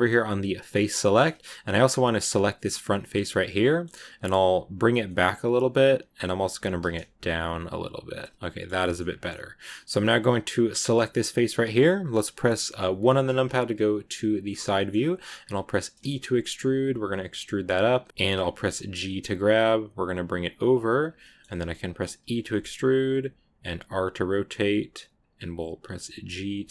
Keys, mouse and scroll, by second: 0.5 click, 1.0-3.0 shift+middle drag, 3.0 right click, 3.2-4.6 middle drag, 4.6 g, 8.2 scroll down 2, 8.3 scroll up 1, 8.3 middle click, 8.9 scroll up 2, 9.6-10.6 middle drag, 10.6 right click, 11.0 scroll down 2, 11.2-12.7 shift+middle drag, 12.7 KP_1, 14.3 click, 14.6 shift+middle click, 14.8-15.3 scroll up 2, 15.9 e, 18.0 shift+middle click, 18.1 click, 21.1 shift+middle click, 22.1 e.